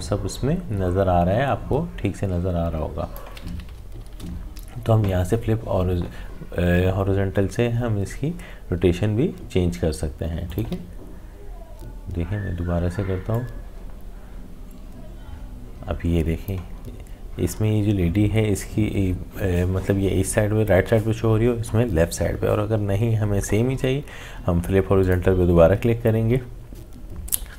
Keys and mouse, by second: 4.0 ctrl+z, 9.7 ctrl+z, 10.5 alt+click, 13.3-18.9 drag, 25.0-27.5 drag.